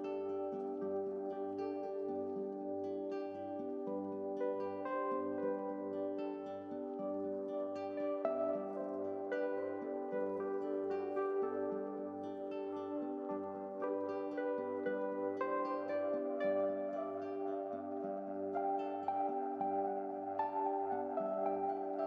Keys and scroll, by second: 0.9 ctrl+e, 0.9 ctrl+z, 4.5 ctrl+l.